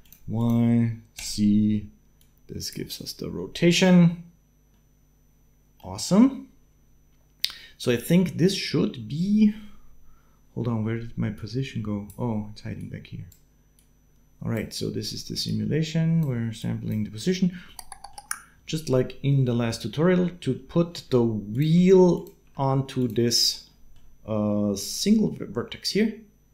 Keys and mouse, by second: 2.0 click, 4.5-5.7 drag, 11.2 click, 12.6 click, 13.5-14.7 drag, 16.4 click, 16.6 click, 17.7 middle click, 18.7-20.3 middle drag, 21.3 click, 21.4 g, 21.9 click, 22.9 g, 23.7 middle click.